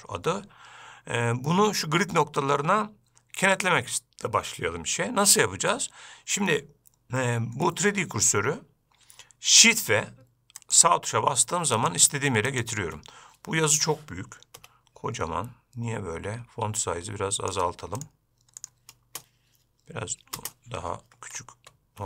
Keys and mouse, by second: 7.9-8.6 middle drag, 10.8 shift+click, 12.0 shift+click, 12.7 shift+click, 14.8 n, 17.1 click, 19.3 space, 21.4 shift+space.